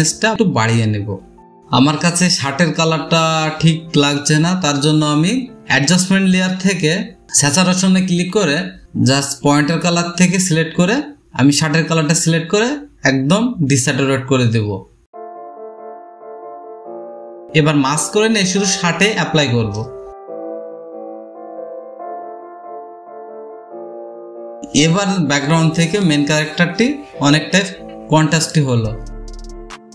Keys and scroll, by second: 0.9 space, 1.0 space, 1.1 space, 19.0 ctrl+i, 20.5-21.5 typing.